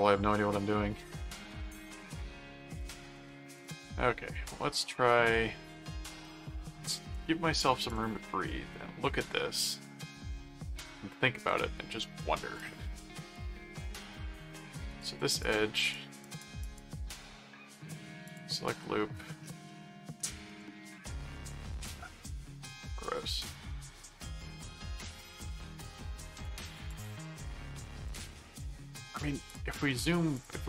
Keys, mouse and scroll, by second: 2.8 click, 3.6 click, 6.0 click, 7.9 click, 8.8 middle click, 9.8 middle click, 12.6 click, 14.8-17.2 drag, 17.1 right click, 18.2 click, 19.6 middle click, 21.1 middle click, 22.0 click, 22.6 middle click, 24.0 middle click, 25.5 middle click, 26.3 click, 27.5 middle click, 28.0 click, 29.5 click, 29.9 middle click, 30.3 click.